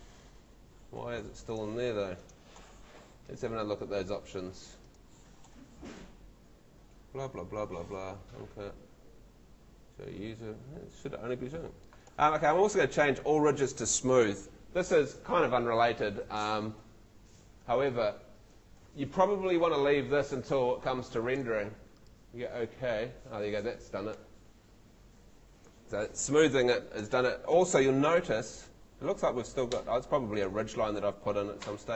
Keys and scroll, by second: 1.0 Escape, 27.0 Escape, 31.5 Escape.